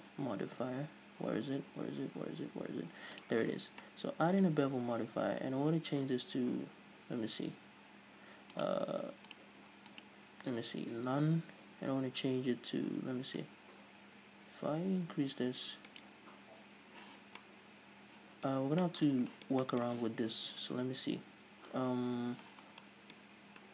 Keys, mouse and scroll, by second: 3.9-8.6 middle drag, 8.6-16.1 drag, 16.1-17.3 right drag, 17.3 scroll down 2, 17.4-23.7 middle drag, 18.6-18.9 scroll up 2, 22.7 scroll down 2, 23.3-23.7 scroll up 2.